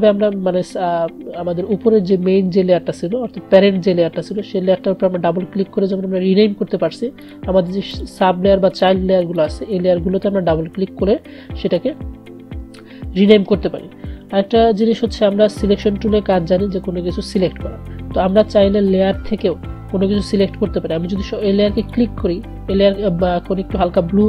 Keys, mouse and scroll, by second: 7.4 click, 17.4 click, 21.9 click.